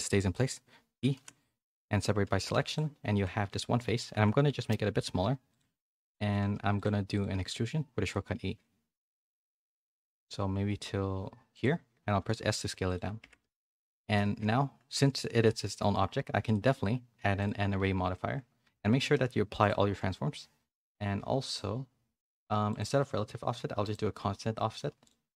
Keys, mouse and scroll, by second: 1.1 p, 2.0 Tab, 2.3 a, 2.5 a, 3.1 Tab, 3.3 2, 4.0 g, 5.8 shift+middle click, 6.2 g, 6.9 3, 7.3 e, 8.2 middle click, 9.8 alt+s, 12.0 s, 13.2 Tab, 13.4 a, 13.5 a, 13.7 middle click, 14.4 Tab, 15.1 click, 15.4 g, 16.5 click, 18.9 ctrl+a, 22.6 click, 23.8-25.1 drag.